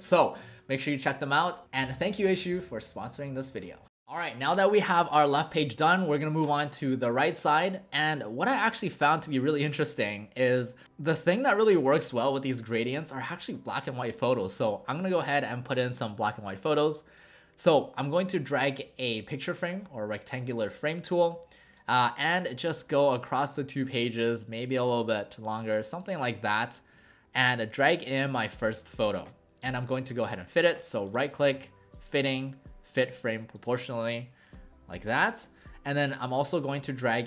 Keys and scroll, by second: 8.5 w, 34.6 w, 35.4 w.